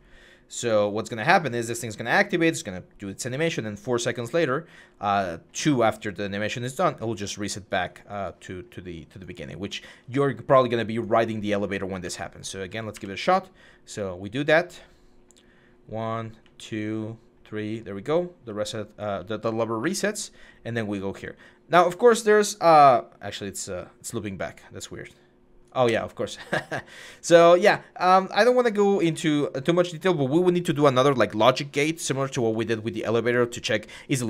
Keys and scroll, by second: 1.0-1.7 typing, 11.8-12.8 typing, 14.8 typing, 16.2-16.8 typing, 18.2-20.7 typing, 25.7 Escape.